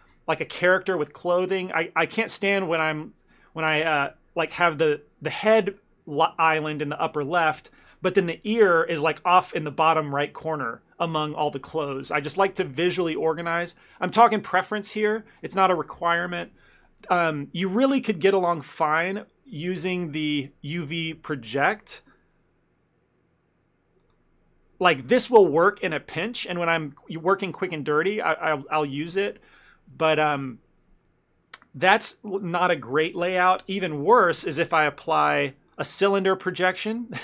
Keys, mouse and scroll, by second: 17.1 ctrl+space, 19.9 u, 36.7 ctrl+middle click.